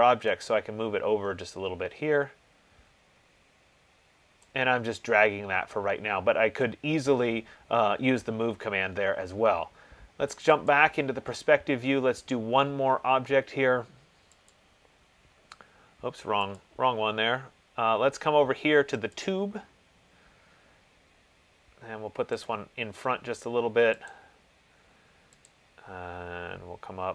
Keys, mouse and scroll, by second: 4.6 click, 10.6 click, 10.9 click, 14.8 click, 16.8 click, 19.4 click, 22.8 click, 24.3 click, 25.7 click.